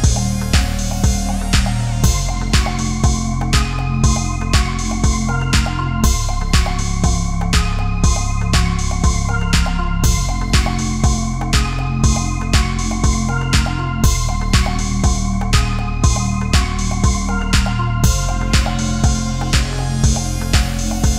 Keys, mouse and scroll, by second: 0.5 middle click, 1.9 click, 2.2 right click, 3.6 click, 5.0 right click, 6.1 click, 10.6 click, 15.9 click, 21.0-21.1 typing.